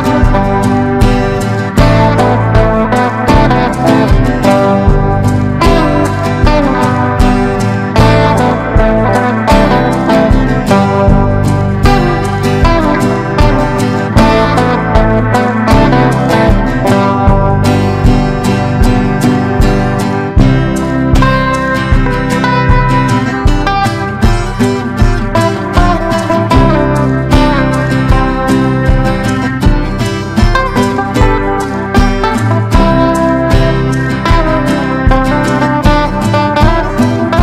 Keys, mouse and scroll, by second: 7.6 ctrl+g, 19.0 ctrl+d, 20.1-27.8 drag, 28.5 ctrl+d, 29.3-35.8 drag, 36.5 ctrl+d.